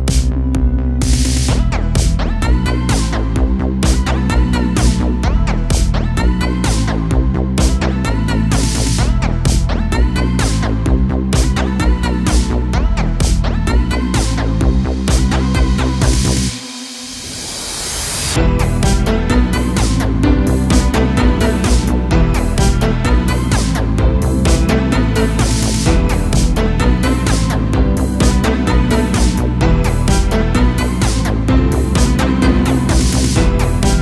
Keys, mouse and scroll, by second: 0.8 shift+a, 4.8 KP_0, 5.6 `, 10.7-11.6 scroll up 2, 11.6-11.9 shift+middle drag, 11.9-12.3 scroll up 1, 12.3 click, 13.1 2, 13.3 click, 13.9 alt+s, 15.4 a, 15.6 a, 15.8 Tab, 16.8-17.3 shift+middle drag, 17.3 Tab, 18.2 1, 18.2 click, 18.6 g, 19.9 click, 20.4 g, 21.3 a, 21.4-21.7 scroll down 2, 21.7 Tab, 22.0 a, 22.2 a, 22.7-24.3 shift+middle drag, 24.3 click, 26.9 click, 28.2 click, 29.1 click, 29.4 click, 30.2 click, 31.7 click, 33.5-34.0 drag.